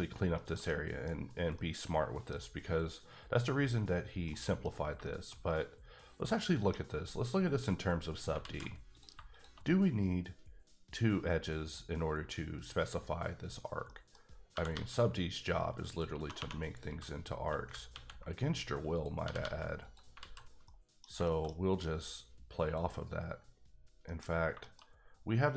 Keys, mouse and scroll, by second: 0.0 middle click, 0.3 shift+scroll down 1, 0.3 shift+middle click, 1.5 middle click, 4.2 middle click, 5.0 shift+middle click, 5.3-5.9 scroll up 2, 5.9-6.3 scroll down 2, 6.3 middle click, 6.8 scroll up 2, 8.1 scroll down 2, 8.4 alt+z, 8.9 click, 13.9 middle click, 14.2 scroll up 1, 14.5 g, 14.7 g, 15.8 click, 16.4 2, 16.7 click, 17.9 ctrl+x, 18.9 click, 19.2 g, 19.4 g, 19.8 click, 20.2 alt+z, 20.4 scroll down 1, 20.6 middle click, 21.0 scroll down 2, 21.2 shift+middle click, 21.6 scroll up 1, 22.6 click, 23.7-24.4 scroll down 4, 24.0 middle click, 24.6 shift+middle click.